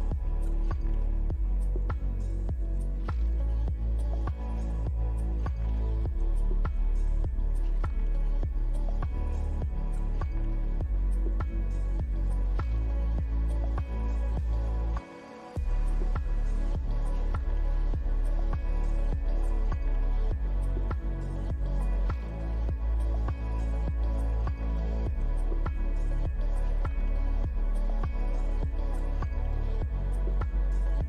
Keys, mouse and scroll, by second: 2.1 middle click, 3.1 click, 10.1-10.4 scroll down 1, 10.4 middle click, 12.2 click, 13.9 shift+click, 15.7 ctrl+l, 23.1 middle click, 23.8 click, 24.2 middle click, 25.4-25.8 scroll up 1, 26.4 middle click, 29.5-29.9 scroll down 1, 29.9 middle click, 30.4 click.